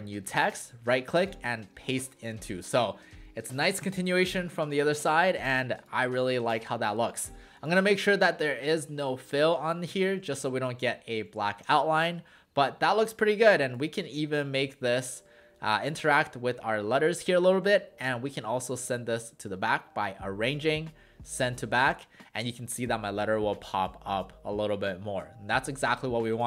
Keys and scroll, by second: 2.5 w, 5.2 w, 11.3 w.